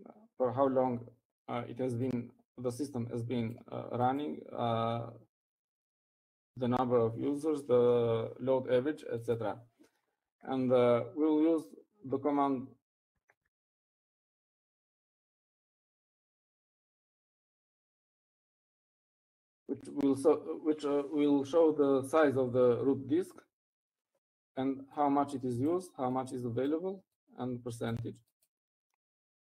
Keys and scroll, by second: 15.8-18.7 typing.